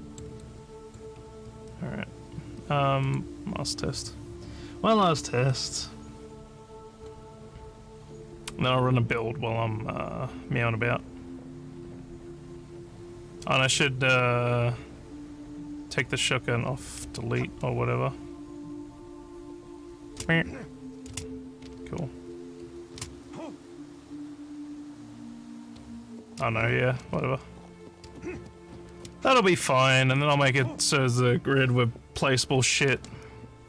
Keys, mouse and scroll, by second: 0.4 alt+click, 3.1 click, 16.9 w, 17.1 space, 18.8 w, 19.3 a, 21.1-22.9 typing, 25.3-27.8 typing, 28.8-30.2 typing.